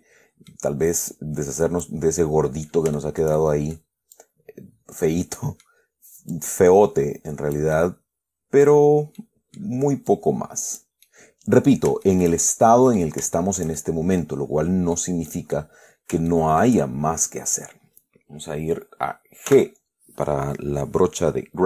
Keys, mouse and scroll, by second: 0.6 middle click, 1.4 click, 2.3 scroll down 1, 2.5 middle click, 2.9 scroll up 1, 3.3-4.2 shift+middle drag, 4.4-5.5 shift+drag, 5.5-6.1 middle drag, 6.6-8.1 drag, 8.1 scroll down 1, 9.5-10.1 middle drag, 10.4 click, 11.3-12.2 middle drag, 12.3-13.5 shift+middle drag, 13.7-15.4 shift+middle drag, 15.6 middle click, 16.4 shift+scroll up 1, 16.6 shift+click, 19.8 g.